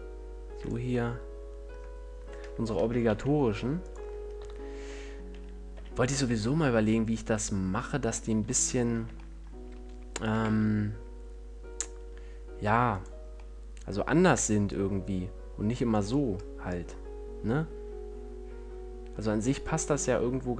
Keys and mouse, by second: 0.9-2.9 drag, 2.9-4.2 middle drag, 4.2-6.0 drag, 4.7 KP_1, 6.0 g, 7.7-9.4 drag, 9.4-12.2 middle drag, 13.3-20.5 drag.